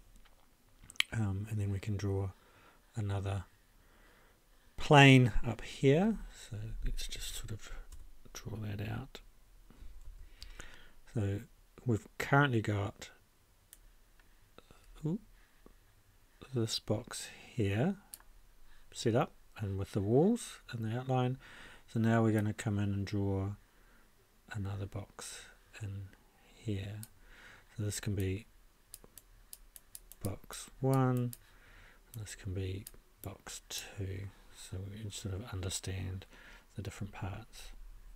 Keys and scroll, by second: 10.0 ctrl+shift+a.